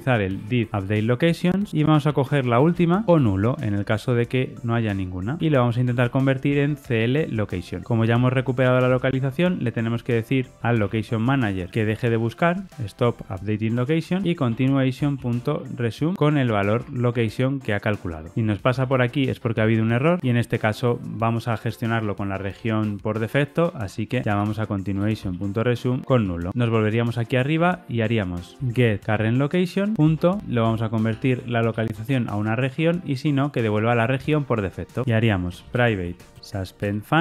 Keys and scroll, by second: 3.1 Return, 6.7 Tab, 13.6 Return, 14.9 Return, 16.6 Tab, 18.8 alt+Return, 24.9 Return, 29.0 ctrl+space, 29.1 Return, 33.2 Tab, 36.4 Return.